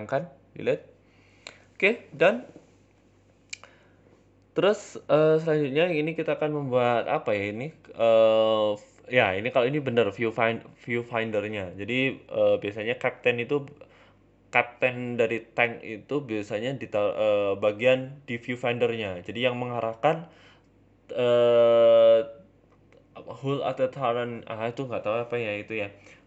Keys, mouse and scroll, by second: 0.5 scroll down 1, 0.7 middle click, 1.5 shift+middle click, 2.1 shift+a, 4.4 KP_7, 5.0 g, 7.1 middle click, 7.1 KP_1, 7.5 g, 8.2 shift+middle click, 8.5 s, 9.3 s, 10.6 KP_7, 11.0-11.6 scroll up 5, 11.6 shift+middle click, 12.0 scroll up 2, 12.3 Tab, 12.7 z, 13.3 shift+middle click, 15.6 shift+middle click, 18.0 shift+middle click, 18.0 s, 18.6 g, 19.4 s, 20.0 g, 21.1 middle click, 21.8 f, 22.4 g, 23.9 x, 24.9 z, 25.7 shift+middle click, 26.0 g.